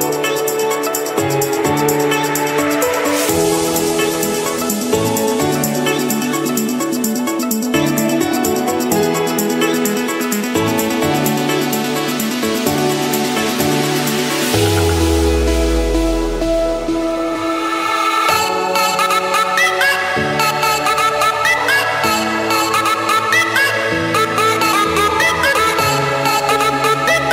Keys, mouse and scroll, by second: 0.9 middle click, 1.7 click, 3.2-3.5 typing, 4.1 Return, 5.8 click, 6.8 click, 8.2-8.8 typing, 9.3 Return, 10.2 Escape, 13.9-15.0 drag, 16.8 click, 17.5 click, 18.0 scroll, 18.3 Escape, 19.4-19.8 typing, 20.5 Return, 23.8 middle click, 25.5 click, 25.9 Return.